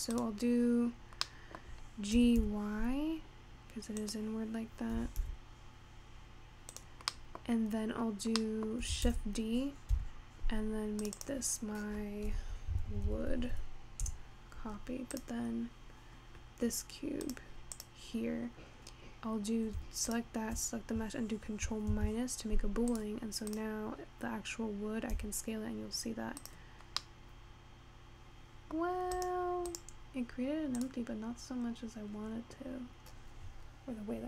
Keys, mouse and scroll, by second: 0.0 middle click, 0.1 click, 0.6-1.2 scroll down 1, 1.2-2.0 scroll up 4, 2.0 middle click, 2.3 g, 5.4 g, 7.3 middle click, 7.5-8.4 scroll up 2, 8.4 scroll down 2, 8.5 middle click, 9.5 shift+d, 11.3-13.3 drag, 13.3 o, 15.1 click, 17.3 click, 17.8 click, 20.1 shift+click, 21.0-21.9 scroll down 1, 21.9 ctrl+KP_Subtract, 22.9 drag, 23.5 click, 24.0 scroll up 2, 25.1 s, 27.0 scroll up 2, 27.2-29.1 middle drag, 29.1 scroll up 1, 29.2-30.3 drag, 30.8 click, 31.5-34.2 scroll down 3.